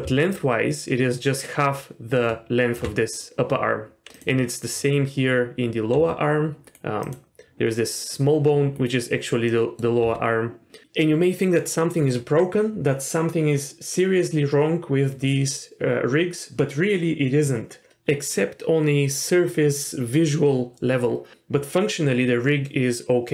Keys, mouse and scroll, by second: 0.0 d, 0.3-2.8 drag, 2.7 d, 2.8 d, 4.1 click, 6.0 r, 7.0 click, 7.4 r, 9.5 middle drag, 10.0 r.